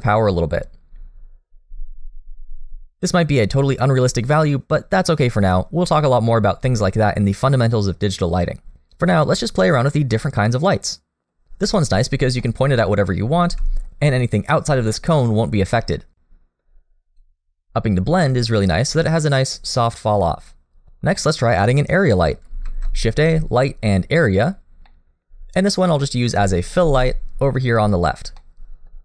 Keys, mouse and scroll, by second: 0.0 click, 10.2 middle click, 12.4 middle click, 13.4 r, 17.2 click, 21.2 middle click, 22.6 shift+a, 24.9 middle click, 26.0 middle click, 26.8 g, 28.4 middle click.